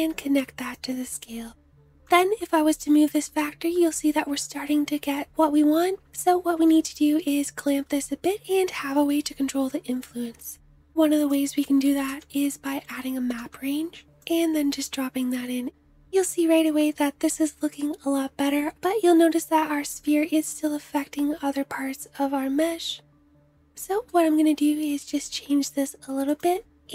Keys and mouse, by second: 10.6 shift+a, 12.2-22.1 drag, 22.1-26.9 middle drag.